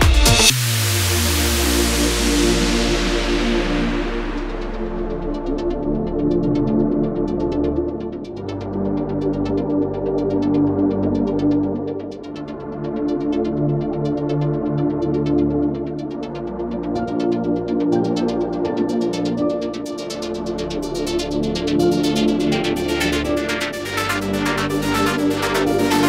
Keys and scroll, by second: 1.3-3.1 typing, 8.6 ctrl++, 8.7 ctrl++, 9.7 ctrl+t, 13.7 space, 14.6 space, 23.5 space, 25.1 ctrl+space.